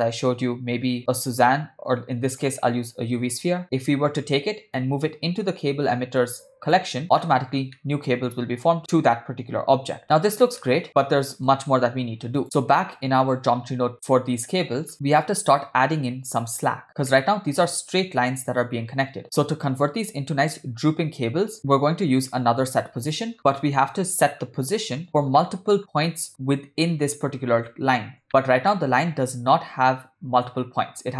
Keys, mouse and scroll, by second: 4.8 click, 7.0-7.5 middle drag, 7.8-8.1 middle drag, 8.8 g, 10.7 middle click, 12.1 x, 12.4 click, 14.9 click, 14.9 middle click, 17.2-17.6 middle drag, 21.6 click, 22.4 shift+a, 25.4-25.8 ctrl+middle drag, 26.1 ctrl+scroll down 1, 26.1 ctrl+middle click, 28.3 shift+middle click, 28.7 ctrl+middle click.